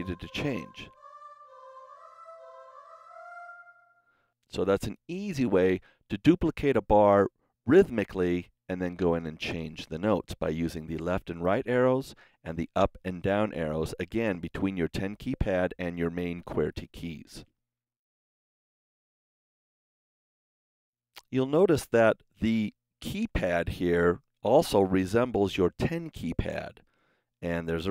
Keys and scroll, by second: 0.1 Right, 0.8 Up, 1.3 Right, 1.6 Up, 2.2 Right, 2.5 Up.